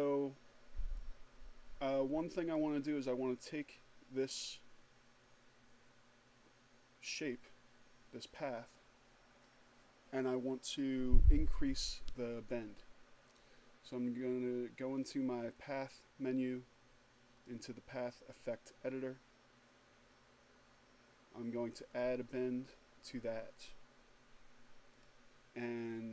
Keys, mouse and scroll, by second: 0.4 click, 1.9 click, 14.6 click, 16.7 click, 21.4 click, 24.1 click.